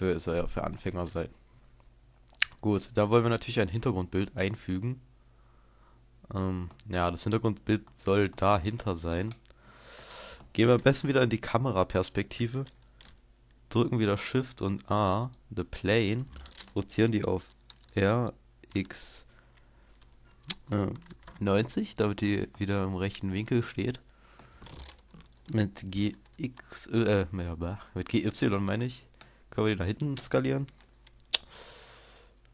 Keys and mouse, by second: 0.0 Escape, 0.0-3.4 middle drag, 3.6-5.5 middle drag, 11.0 KP_0, 14.0 shift+a, 17.8 r, 21.9-25.8 drag, 25.8 g, 28.4-31.8 drag, 32.2 s.